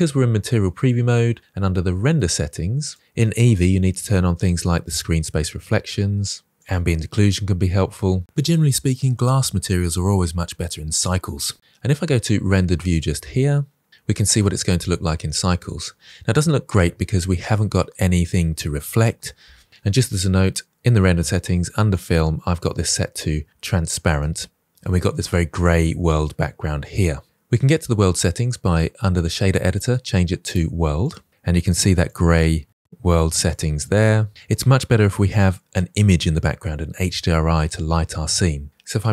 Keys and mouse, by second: 2.0 click, 2.8 click, 4.8 click, 6.7 click, 9.6-10.8 drag, 16.3-17.8 middle drag, 24.0 click, 29.6-31.0 drag, 31.8 middle click, 32.4-32.9 drag.